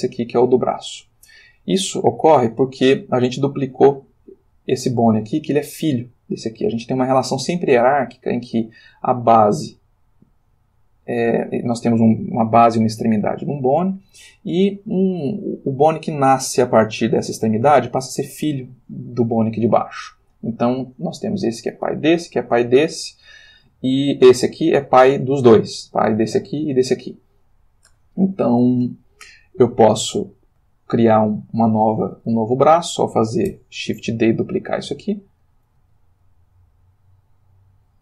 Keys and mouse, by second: 3.6 click, 30.1 click, 31.1 shift+click, 31.8 shift+click, 33.5 shift+d, 35.4 click, 35.8 r, 37.0 click.